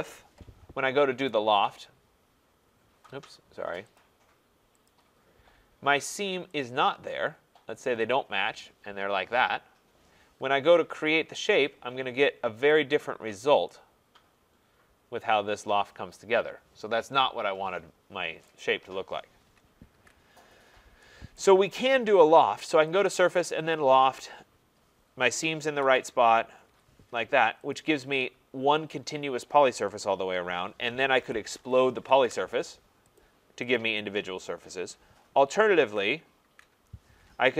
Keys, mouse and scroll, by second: 1.3 right click, 4.0 click, 4.9 click, 6.6 click, 8.1 click, 10.9 Return, 12.7 click, 13.3 scroll, 18.1 scroll, 18.5 right click, 19.9 ctrl+z, 20.6-21.1 scroll, 21.4 right click, 23.0 click, 23.8 click, 25.8 Return, 26.6 Return, 27.7 click, 31.0-32.3 typing, 33.2 click, 33.8 click, 35.8 ctrl+z, 36.4 ctrl+z.